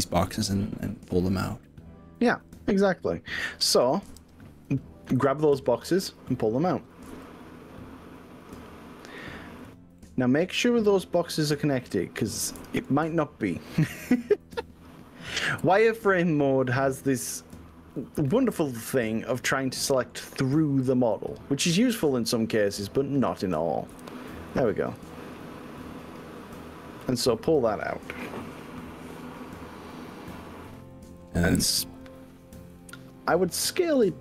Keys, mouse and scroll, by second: 4.1 3, 4.7 click, 7.1 e, 9.7 click, 10.0-12.5 middle drag, 12.7 ctrl+z, 13.5 click, 13.9-16.3 middle drag, 14.3 ctrl+z, 14.3 click, 17.0 middle click, 18.3 click, 19.0-20.1 middle drag, 20.9 shift+click, 21.3-23.3 middle drag, 23.9 KP_1, 25.0 KP_3, 27.5 e, 29.9 click, 30.7 click, 31.3 click, 32.1 click, 32.8 click.